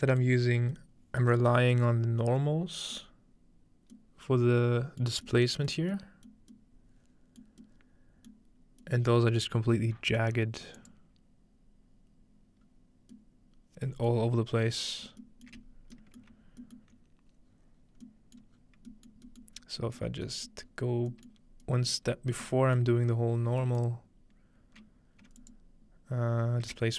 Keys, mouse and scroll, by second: 0.4 middle click, 0.9-1.7 scroll up 2, 1.7-3.0 scroll up 1, 3.0-3.9 middle drag, 5.0 middle click, 5.8 middle click, 7.6-8.3 middle drag, 8.6 middle click, 8.6-10.8 scroll up 2, 9.2-10.8 middle drag, 10.8-12.7 drag, 13.1 middle click, 14.5-15.9 middle drag, 14.5-15.7 scroll down 2, 15.7 scroll up 2, 16.2 alt+shift+middle click, 16.4-17.3 scroll up 1, 17.5-19.6 scroll down 2, 19.6 scroll up 2, 20.5 scroll up 2, 21.3-21.6 middle drag, 21.3-22.9 scroll up 3, 21.9 middle click, 22.9 middle click, 22.9-24.9 scroll down 5, 24.9-25.2 scroll down 1, 25.4 alt+shift+click.